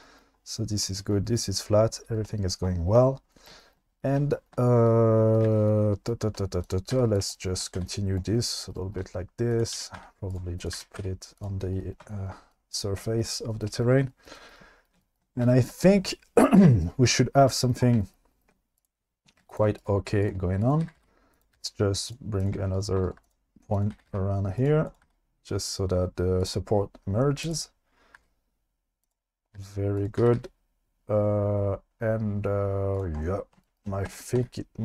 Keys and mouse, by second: 6.2 shift+middle click, 6.9 e, 7.2 shift+middle click, 7.8 e, 9.7 g, 10.0 z, 10.3 click, 10.7 g, 11.0 z, 11.4 click, 12.0 shift+middle click, 13.0 shift+middle drag, 19.9 right click, 20.7 click, 20.8 g, 21.0 g, 21.3 click, 21.5 g, 22.1 click, 22.8 shift+click, 23.1 click, 23.8 click, 23.9 g, 24.1 g, 24.6 click, 25.0 g, 26.4 click, 27.4 click, 28.2 g, 29.0 click, 30.2 g, 30.4 g, 32.9 click, 34.1 Tab, 34.4 q.